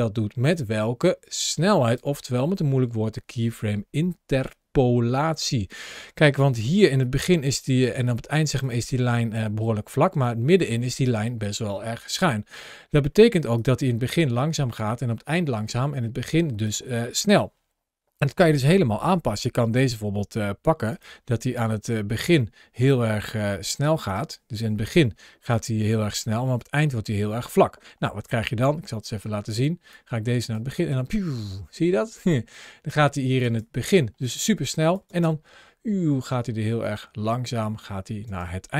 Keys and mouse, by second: 20.9 g, 23.9 click, 25.1 ctrl+shift+l, 28.9 middle click, 29.7-30.4 drag, 30.6 space, 33.3 space, 33.5-34.8 drag, 38.1 space.